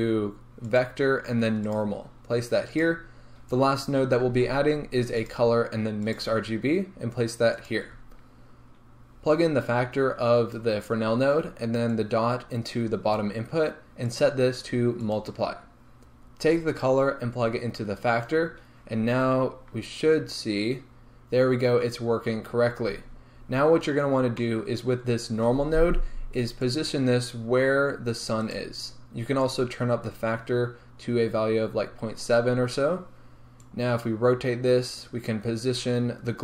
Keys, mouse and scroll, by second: 11.9 drag, 21.3 scroll down 1, 23.3 scroll up 1, 26.7-28.7 drag, 28.7 right click, 29.6-36.4 drag.